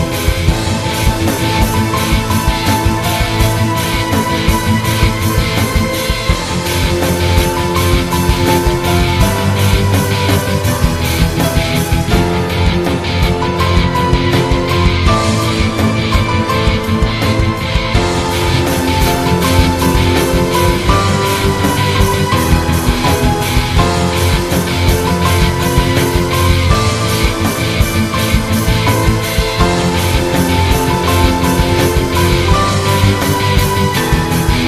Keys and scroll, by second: 15.9 ctrl+z, 16.9 ctrl+z, 17.2 i, 18.7 i, 26.9 -, 30.1 [, 31.8 i, 32.2 i, 33.0 i, 33.7 i.